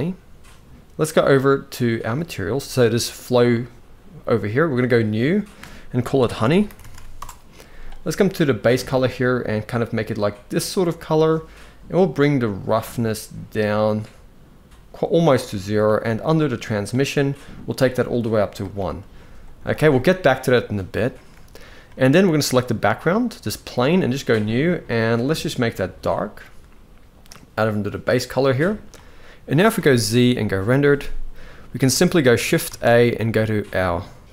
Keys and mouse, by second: 1.7 click, 4.6 click, 5.2-6.8 drag, 8.4 click, 11.8-15.5 drag, 16.4 click, 17.6 click, 19.3 ctrl+s, 19.4 ctrl+s, 20.6-22.1 shift+middle drag, 22.1 click, 23.8 click, 25.0 drag, 29.8 z, 32.3 shift+a.